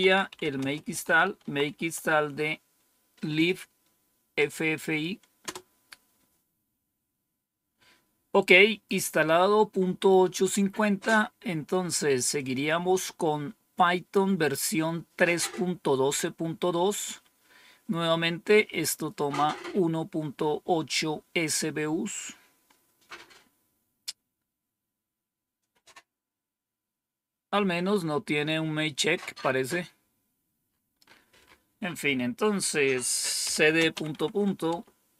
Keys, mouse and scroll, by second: 0.0-2.0 typing, 5.3 Return, 10.3 click, 12.2 click, 18.3-19.5 drag, 21.2-22.1 scroll down 2, 22.1-23.0 scroll down 1, 23.0 scroll up 2, 24.4 scroll down 2, 25.2-26.3 scroll down 2, 26.9-27.7 scroll down 1, 28.0-28.7 scroll down 1, 29.1-30.6 scroll down 1, 30.6-32.5 scroll up 2, 32.5 click, 33.1-35.1 typing.